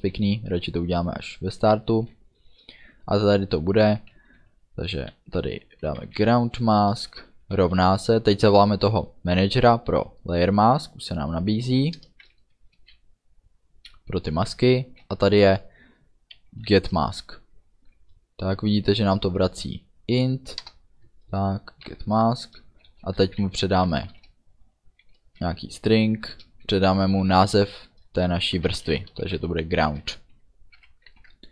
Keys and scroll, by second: 5.9 g, 6.1 r, 6.2 o, 7.0 Return, 7.2 space, 7.5 =, 7.7 space, 8.4 shift+l, 12.0 Return, 12.9 ., 16.7 Down, 20.7 Return, 21.9 shift+9, 23.4 shift+§, 24.1 Left, 28.6 shift+g, 28.9 r, 29.0 o, 29.9 Right, 30.8 ů, 31.1 ctrl+s.